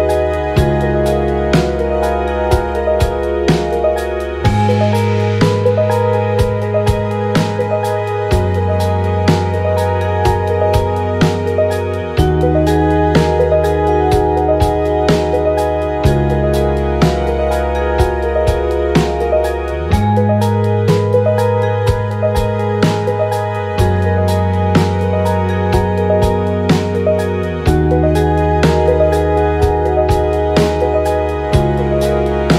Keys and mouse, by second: 1.4 click, 3.2-6.0 drag, 6.9 click, 8.0-10.8 drag, 11.7 click, 13.2 click, 20.7 click, 21.3 space, 26.6 space, 28.0 click, 28.6 KP_1, 30.0 click.